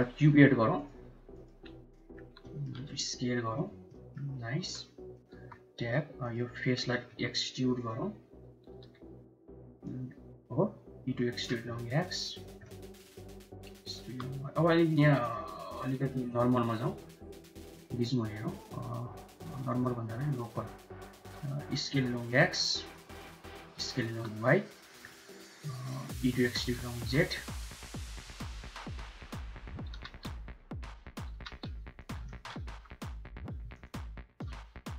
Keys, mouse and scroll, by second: 0.0-2.8 typing, 2.2 shift+middle click, 3.8 middle click, 4.4 r, 5.1 Tab, 6.1 click, 6.9 e, 8.5 g, 10.9 e, 11.4 s, 12.5 middle click, 13.4 s, 15.0-16.3 drag, 17.4 click, 19.6 click, 21.0 s, 23.4 s, 24.9 middle click, 26.1 e, 28.1-29.4 middle drag, 29.8 g, 31.1 g, 32.1 shift+middle click, 32.5 2, 33.0 click.